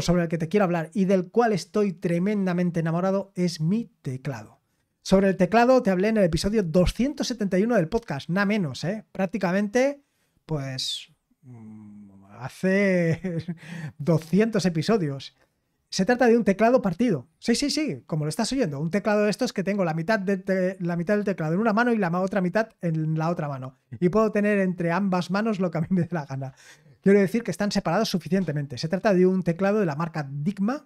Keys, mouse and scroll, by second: 5.1-30.8 scroll down 1.